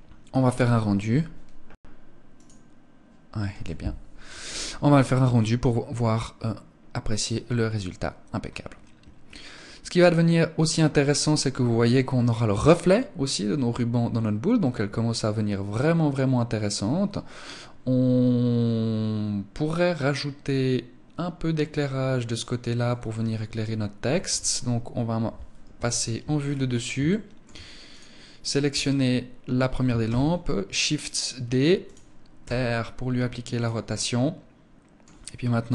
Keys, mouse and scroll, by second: 1.8 right click, 23.4 Escape, 25.2 KP_7, 25.8-26.5 scroll down 3, 26.5 shift+middle click, 26.5 scroll down 1, 27.3 right click, 29.4 shift+d, 31.3 click, 31.8 r, 33.0 click, 35.2 g.